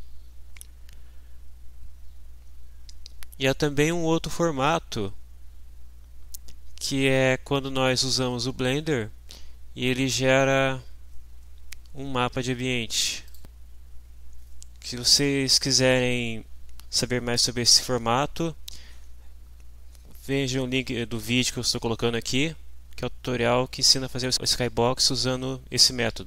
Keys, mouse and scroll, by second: 0.0 scroll down 2, 0.7 scroll down 2, 1.7-2.6 scroll down 4, 4.1-4.4 scroll down 1, 5.5 scroll down 1, 8.5-8.8 scroll down 2, 9.4 scroll down 2, 10.2-12.2 scroll up 12, 13.2 click.